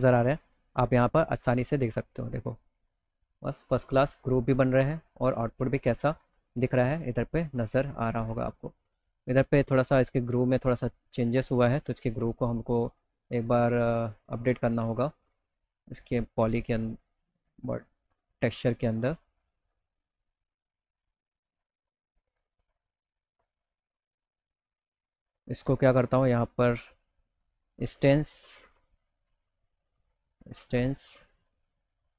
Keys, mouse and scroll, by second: 1.7 middle click, 5.4 middle click, 6.1 middle click, 6.7 middle click, 7.3 middle click, 7.9 middle click, 8.3 middle click, 8.8 middle click, 10.5 middle click, 11.2 click, 14.1 click, 15.2 click, 20.4 click, 25.0 click, 27.0 click, 27.5 click, 28.5 click, 29.9 click.